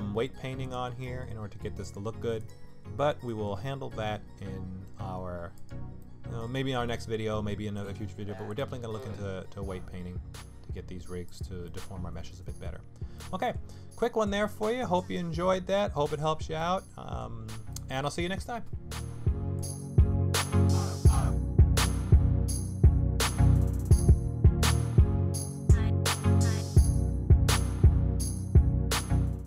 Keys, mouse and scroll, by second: 0.6 click, 1.0 middle click, 1.8 click, 2.4 click, 3.2 middle click, 3.6 g, 6.0 middle click, 6.9 middle click, 8.5 click, 9.0 middle click, 9.4 g, 11.6 middle click, 12.5-13.2 scroll down 2, 13.2 middle click, 15.1 middle click, 16.6 middle click, 17.7 middle click.